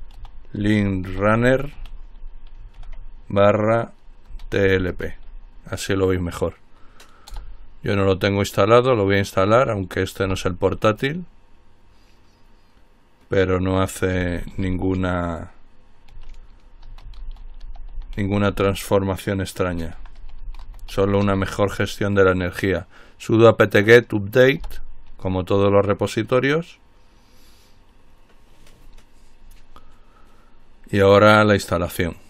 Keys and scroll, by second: 0.0-2.9 typing, 4.2-5.6 typing, 7.2-8.0 typing, 14.3-15.3 typing, 16.8-21.9 typing.